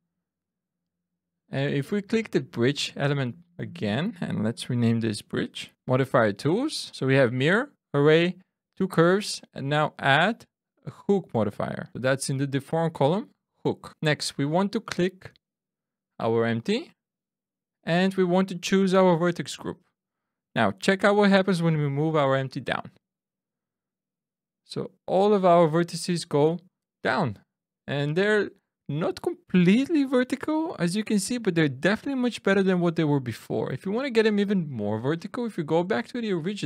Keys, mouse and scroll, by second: 2.1 click, 4.6 F2, 5.8 click, 6.9 click, 9.3 click, 14.8 click, 18.5 click, 21.6 click, 22.8 click, 26.2 middle click, 30.3 middle click, 34.5-35.1 scroll down 1, 35.1 scroll down 1, 35.2 shift+middle click, 36.5 Tab.